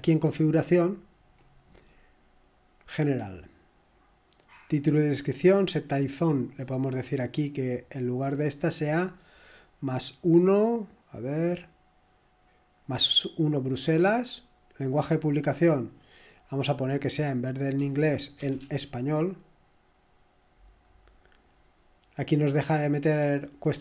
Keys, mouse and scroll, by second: 0.1 click, 1.8-2.1 scroll up 1, 3.0 click, 6.2 click, 7.5 click, 14.6 click, 16.2 click, 17.0 click, 17.7 click, 18.2 click, 18.5-19.2 typing, 19.3 click, 21.0-21.4 scroll down 1.